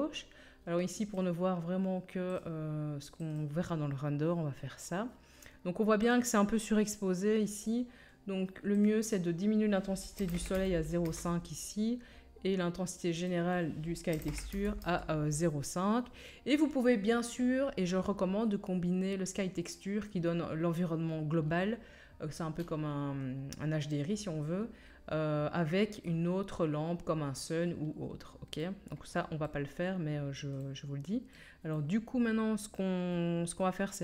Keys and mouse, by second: 1.1-2.3 drag, 2.3 middle click, 2.3 click, 3.1 middle click, 3.3-6.0 drag, 6.0 middle click, 6.1-8.8 drag, 8.8-34.0 middle drag.